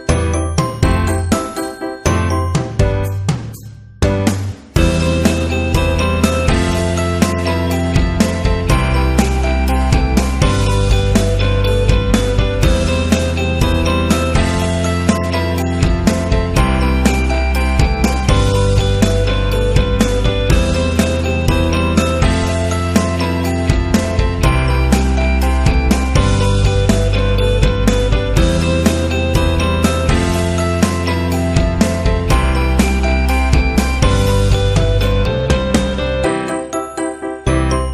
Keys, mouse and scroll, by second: 2.5 click, 5.0 click, 6.4-12.8 drag, 14.6-16.8 drag, 17.6 click, 17.8 typing, 20.6 space, 21.3 scroll up 1, 23.0 click, 27.2 click, 28.6 click, 30.1 click, 32.1 click, 32.3 typing, 32.6 click, 33.0 click, 33.3 click, 33.7 click, 34.0 click, 37.4 click.